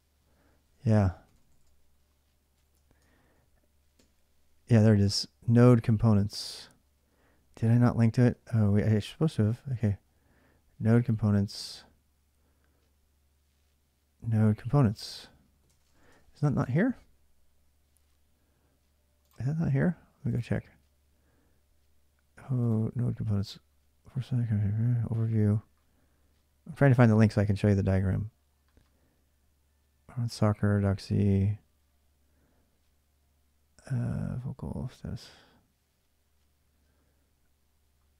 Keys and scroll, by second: 0.0-3.7 typing, 5.3-11.2 typing, 14.5-16.3 typing, 16.4 alt+Tab.